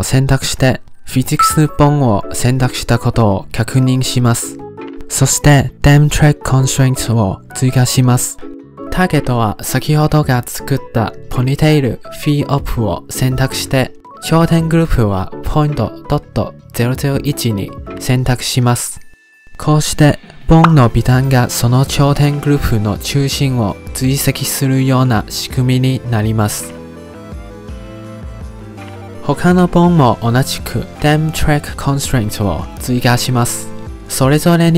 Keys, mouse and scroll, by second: 0.3 click, 5.6 click, 6.0-7.5 drag, 7.9-9.8 drag, 15.1-18.6 drag, 20.1-23.9 drag, 24.5 click, 25.4 click, 26.2 click, 27.0 click, 27.9 click, 28.7 click, 29.5 click, 29.9-31.8 drag, 33.2 shift+click, 33.7-34.6 drag.